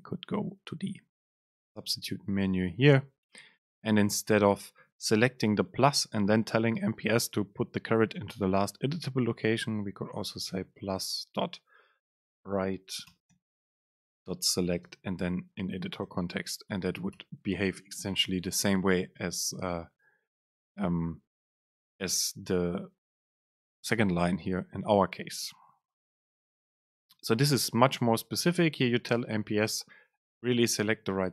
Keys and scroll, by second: 9.4 Up, 9.7 Return, 12.2 super+space, 18.2 Down, 18.5 Up, 19.3 shift+Down, 21.6 Down, 22.0 Up, 25.3 alt+Up, 25.9 Up, 26.4 Down, 27.3 Up, 28.1 Home, 28.5 Right, 29.0 End, 29.5 Home, 30.2 ctrl+shift+super+Right.